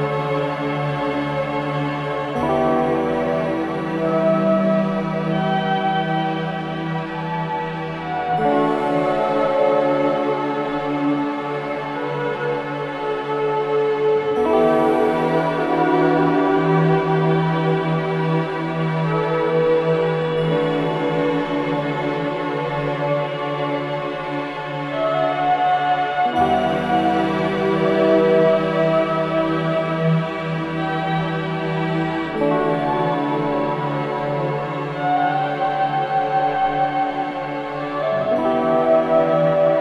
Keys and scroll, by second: 10.0 ctrl+z, 13.3 4, 15.2 3, 20.8 4, 22.1 2, 23.4 4, 26.0 3, 26.4 ], 26.6 Delete, 27.6 ], 29.3 4, 31.2 ctrl+d, 31.2 Escape, 36.4 2.